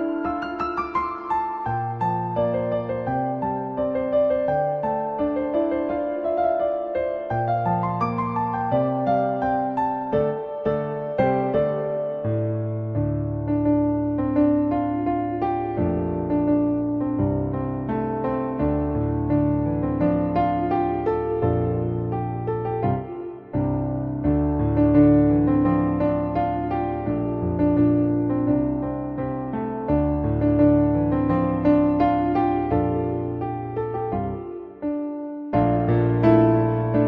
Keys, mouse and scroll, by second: 0.6-2.8 drag, 3.2 middle click, 5.5 click, 5.5 `, 6.6 `, 7.3 middle click, 9.7 shift+middle drag, 13.5 click, 15.0 Tab, 15.4 middle click, 16.2-17.4 right drag, 19.5-20.5 right drag, 20.7 right click, 21.5 right click, 22.5 Tab, 24.9-27.3 drag, 29.0 click, 29.6 click, 32.4 Tab, 32.5 middle click, 33.9 shift+middle drag, 35.3 drag, 36.8-37.0 drag.